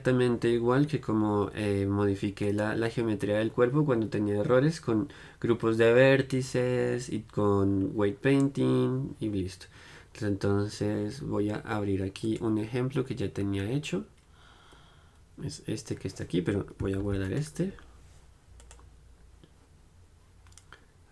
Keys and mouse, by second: 2.6-12.3 right drag, 12.3-21.1 drag.